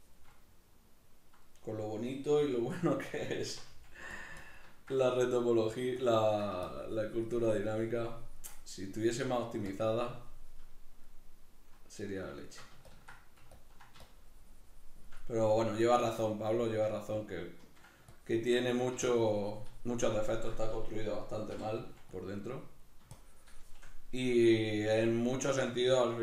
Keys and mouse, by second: 0.3 middle click, 1.5 middle click, 2.4 f, 2.8 click, 3.5 c, 4.4-8.6 ctrl+drag, 8.6-9.7 middle drag, 9.7-11.0 shift+drag, 11.0-12.9 middle drag, 12.9-15.2 ctrl+drag, 15.2-18.2 middle drag, 18.2 ctrl+click, 18.7 middle click, 19.1-22.2 shift+drag, 21.5 g, 23.2 shift+click, 23.9-26.2 middle drag.